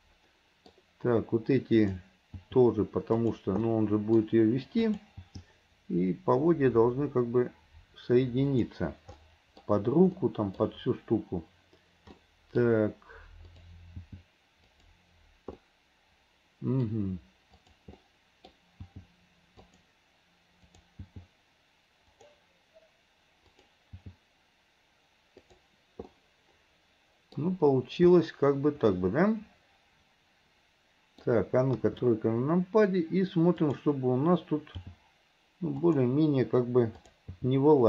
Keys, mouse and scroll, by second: 1.8 click, 2.5 g, 3.7-4.9 middle drag, 4.9 click, 5.2 g, 9.2-10.2 middle drag, 10.2 scroll up 1, 10.4-12.2 middle drag, 12.2-13.6 scroll up 1, 13.6 click, 14.0 g, 15.7-17.1 middle drag, 17.6 click, 18.0-18.9 middle drag, 18.9 g, 20.7 click, 21.1 g, 23.6 click, 26.2 scroll up 1, 26.2-28.2 middle drag, 28.2 scroll up 1, 28.2-31.8 middle drag, 31.8 KP_3, 33.7 click, 34.8 g, 37.1 click, 37.4 g.